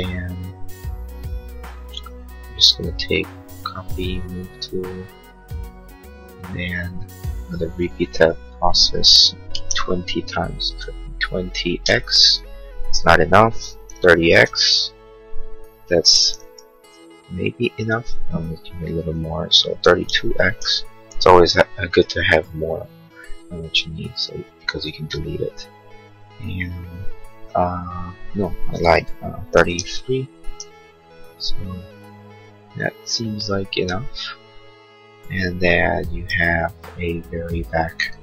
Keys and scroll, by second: 9.2-10.9 typing, 11.9 Return, 13.9 3, 14.5 Return, 19.5-20.9 typing, 29.5 3, 30.3 x, 30.6 Return.